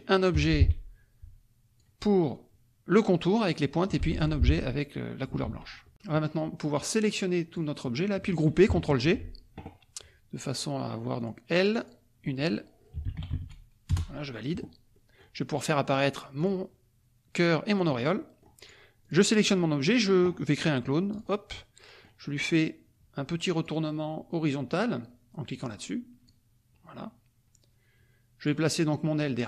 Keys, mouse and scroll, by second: 0.3 F1, 0.5-1.9 drag, 4.1 F2, 4.1 click, 5.4 ctrl+z, 5.9 KP_Subtract, 6.7 click, 7.9 click, 9.0 ctrl+g, 10.5 click, 11.1 click, 11.6 click, 12.8-13.6 typing, 13.9 Return, 14.9 middle click, 16.4 click, 17.7 click, 18.1 middle click, 18.6 click, 19.0 click, 21.1 click, 21.5 middle click, 22.5-23.8 drag, 25.5 click, 26.2-28.6 drag.